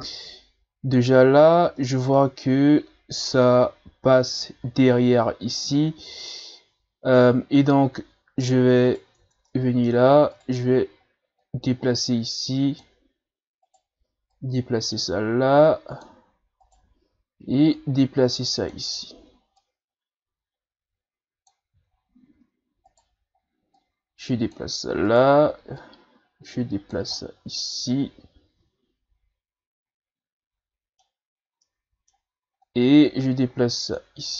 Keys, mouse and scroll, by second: 0.0-1.8 scroll up 1, 1.8-4.8 middle drag, 5.7-8.7 middle drag, 8.9 right click, 9.2 Tab, 9.5 middle click, 10.3 right click, 11.4-13.6 drag, 13.6 right click, 14.3-16.6 drag, 16.6 right click, 17.8-21.9 drag, 21.9-22.9 shift+scroll down 2, 22.9 right click, 23.7-25.1 drag, 25.1 right click, 25.8-27.2 drag, 27.2-30.2 middle drag, 31.6-32.7 middle drag, 32.7-34.3 drag.